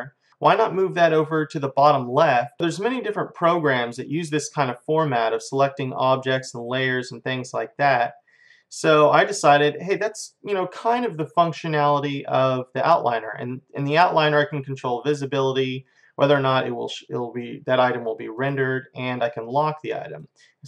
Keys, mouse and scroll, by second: 0.3-1.9 drag, 2.6-6.1 drag, 9.9-11.6 drag, 14.0-18.2 drag, 18.5-20.6 drag.